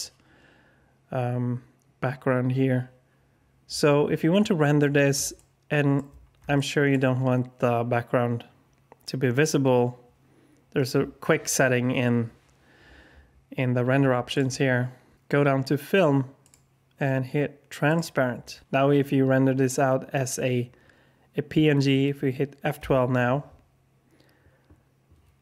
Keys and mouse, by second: 5.3-5.9 shift+middle drag, 6.5 alt+shift+click, 16.4 click, 17.8 click.